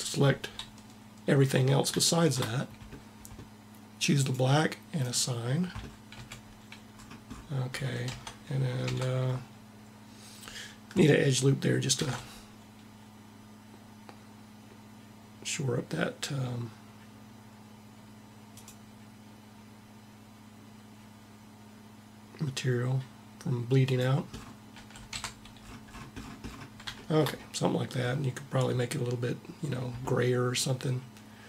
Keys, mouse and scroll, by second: 3.9-6.5 drag, 5.8 a, 7.7 Tab, 8.5 Tab, 11.5 ctrl+r, 24.3 a, 24.9 Tab.